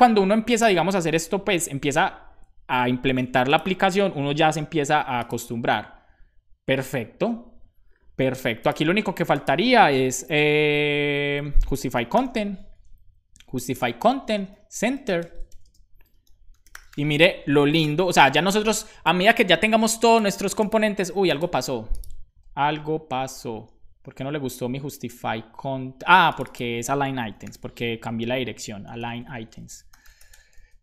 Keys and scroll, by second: 1.2 Return, 1.7 super+s, 10.1 ,, 10.1 space, 11.6-12.8 typing, 12.9 Down, 13.3 Up, 13.6 Return, 14.0-17.1 typing, 17.1 super+s, 18.0 super+s, 24.0 super+s, 26.8-28.0 typing, 28.1 Return, 29.7-30.7 typing.